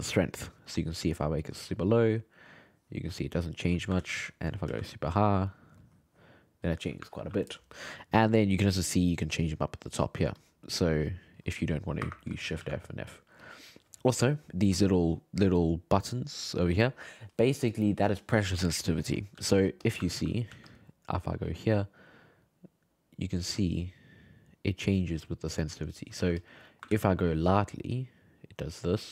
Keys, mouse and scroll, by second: 2.7-4.0 drag, 4.0 ctrl+z, 4.7 shift+f, 5.8-7.2 drag, 7.2 ctrl+z, 9.7 click, 10.8-12.6 drag, 12.6 shift+f, 19.4 f, 20.1 ctrl+middle click, 20.5 f, 21.2-24.2 drag, 26.2 f, 26.6 middle click, 26.9 ctrl+z, 27.7-29.1 drag.